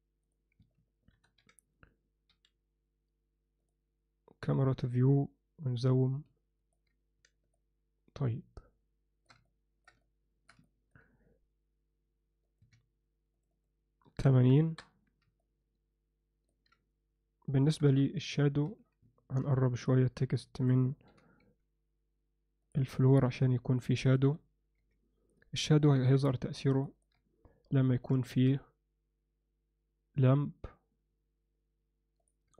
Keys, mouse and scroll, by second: 1.1 ctrl+alt+KP_0, 2.3 n, 3.6 drag, 4.5 click, 4.7 n, 6.0-6.8 ctrl+middle drag, 7.6-9.3 alt+shift+middle drag, 9.5 ctrl+middle click, 10.0-10.5 shift+middle drag, 10.6 ctrl+alt+middle click, 12.6-14.9 drag, 15.4-16.5 ctrl+alt+middle drag, 17.7 KP_0, 17.9 KP_3, 18.6 z, 19.8 drag, 20.4 ctrl+middle click, 21.1 g, 23.4-23.8 alt+middle drag, 24.2 KP_0, 24.8 z, 25.9 KP_0, 26.1 KP_1, 26.8 ctrl+alt+middle click, 28.2 shift+a.